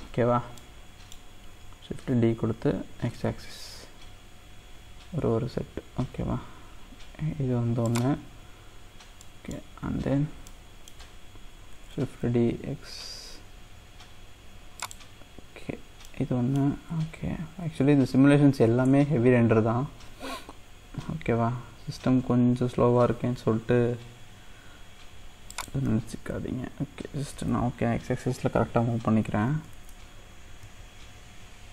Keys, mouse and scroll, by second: 2.3 shift+d, 9.3 middle click, 9.6-10.5 scroll down 2, 10.5-12.3 middle drag, 12.3 shift+d, 16.0-19.4 middle drag, 19.4 shift+d, 28.3 ctrl+z, 30.4 shift+d.